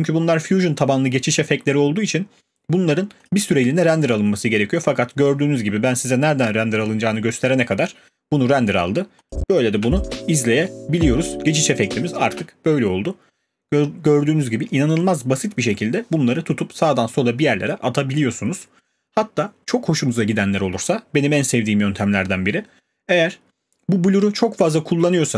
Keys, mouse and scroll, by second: 3.3-8.3 drag, 9.3 click, 9.6 click, 9.8 space, 12.3 space.